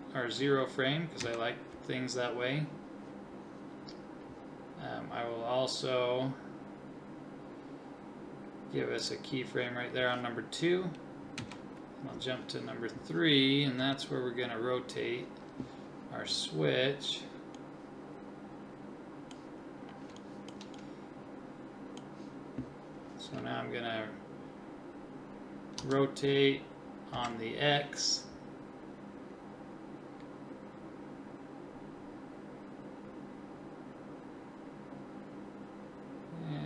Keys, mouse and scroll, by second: 1.2 Right, 9.0 click, 11.4 Right, 13.8 KP_3, 25.8 r.